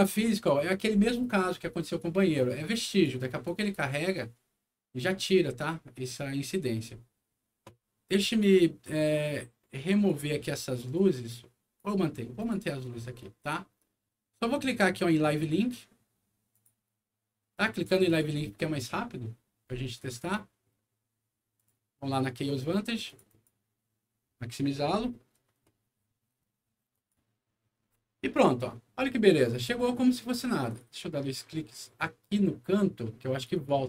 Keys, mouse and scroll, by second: 2.9 click, 3.4 click, 6.6 middle click, 8.2 click, 9.8 click, 10.9 click, 12.4 click, 13.2 middle click, 16.5 click, 17.7 click, 18.0 click, 21.5 click, 23.0 click, 23.3 click, 26.9 click, 28.3 click, 30.6 click, 30.8 click, 33.3 click, 33.5 click.